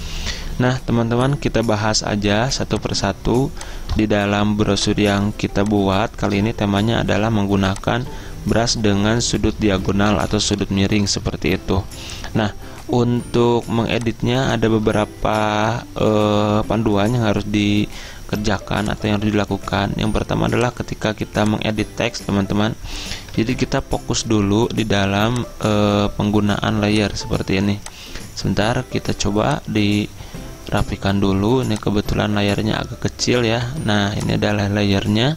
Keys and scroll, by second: 7.1-8.8 typing, 10.2 ctrl+-, 10.3-11.1 typing, 23.5 ctrl+z.